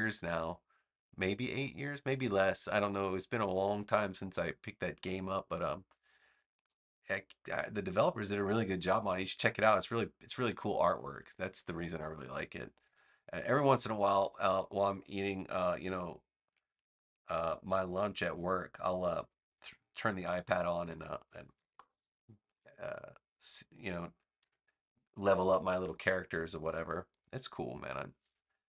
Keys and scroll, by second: 12.7 v, 21.6 super+Return, 24.3 v, 25.3 BackSpace.